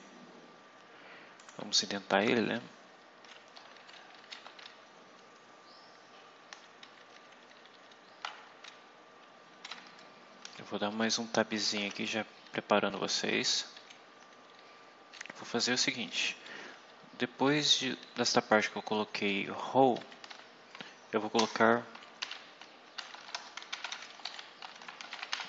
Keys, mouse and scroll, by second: 1.3 click, 2.5-3.5 shift+scroll down 2, 3.5-4.1 shift+scroll up 2, 4.1 shift+scroll down 2, 4.3 shift+Home, 4.6 shift+Down, 7.4 shift+Up, 8.4 shift+Tab, 11.7 Tab, 12.4 Up, 13.3 Down, 14.6 Up, 15.1 Down, 15.7 Up, 16.2 Down, 19.2 Down, 19.9 Up, 20.2 End, 21.3 Return, 22.1-25.4 typing.